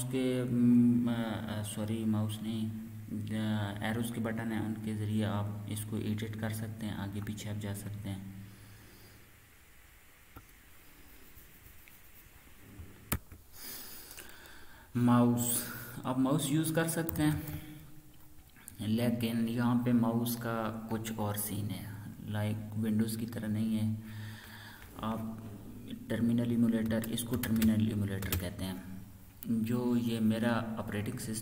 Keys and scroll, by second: 5.2 BackSpace, 6.0-7.1 Left, 7.9 Tab, 8.6-10.3 Right, 13.1 ctrl+r, 16.8-17.6 typing.